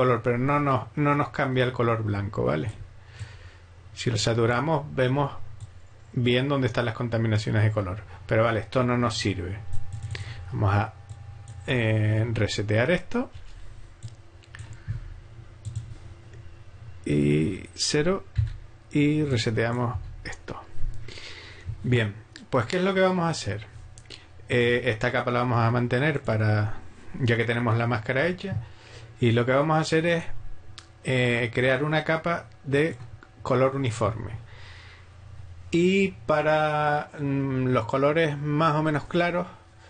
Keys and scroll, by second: 13.4 BackSpace, 18.4 0.